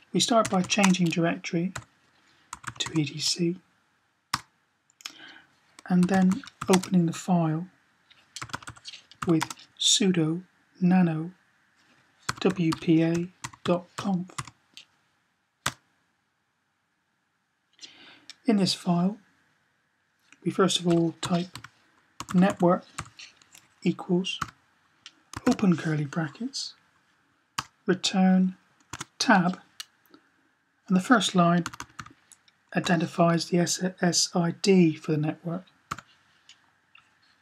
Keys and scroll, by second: 0.3 typing, 1.6-2.8 typing, 5.6-6.4 typing, 8.2-9.0 typing, 11.9-14.3 typing, 20.4-22.8 typing, 24.2-25.2 typing, 31.4-32.6 typing, 35.8 typing.